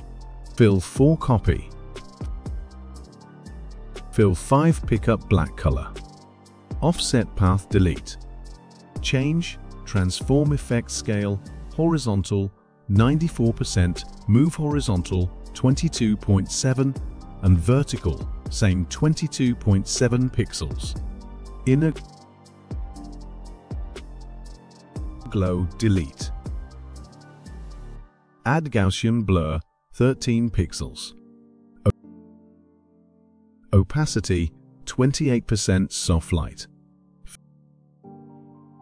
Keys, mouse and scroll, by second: 2.0-9.3 drag, 11.2 typing, 12.4 click, 13.0 click, 13.6-14.5 typing, 15.8-16.9 typing, 17.3-18.7 drag, 18.7-19.7 typing, 21.1-21.9 typing, 22.5-23.9 drag, 24.1 click, 26.1 click, 26.7 click, 28.9 click, 30.8 click, 32.6 click, 34.4 click, 35.7-36.7 typing, 36.9 click, 38.6 click.